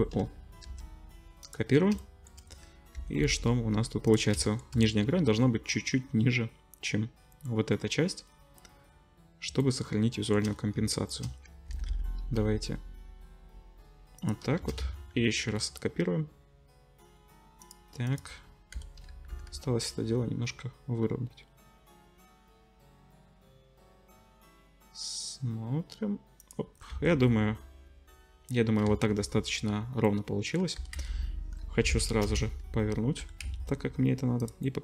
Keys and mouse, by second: 0.6 shift+d, 2.9 g, 4.8 click, 4.9 click, 8.2-9.5 drag, 11.7 g, 14.6 shift+d, 18.0 middle click, 18.7 l, 19.3 g, 26.9 Tab, 28.2-34.8 drag, 28.9 ctrl+s, 30.8 r, 33.2 g.